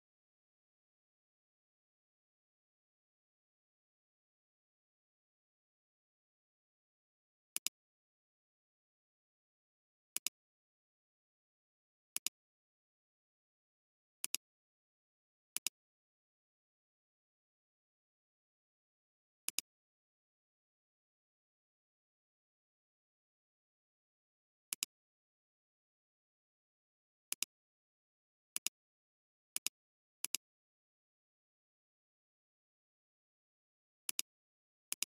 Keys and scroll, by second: 27.3 alt+space, 27.9 alt+space, 28.5 alt+space, 29.5 space, 35.0 space.